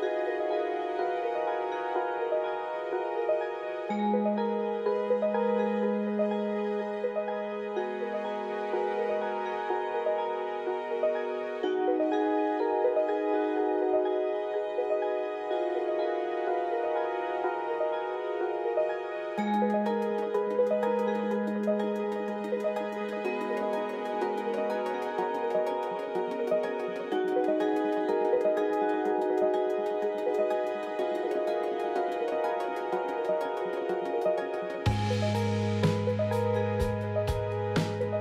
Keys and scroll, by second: 1.3 z, 2.2 1, 3.7 1, 12.7 alt+x, 17.5 alt+x, 18.2 ctrl+z, 20.4-21.9 typing, 27.6 ctrl+z, 30.1 Delete, 33.4 f, 33.9 ctrl+c, 38.0 F4.